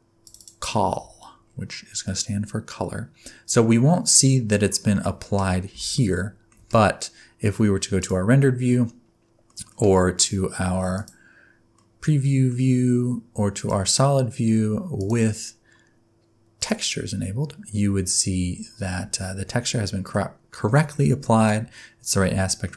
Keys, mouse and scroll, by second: 1.4-2.2 scroll down 6, 2.2 middle click, 6.0 shift+middle click, 8.4 click, 9.5 middle click, 11.0 click, 11.8 middle click, 13.6 click, 15.0 click, 19.2 middle click, 20.2 scroll down 2, 21.0 middle click.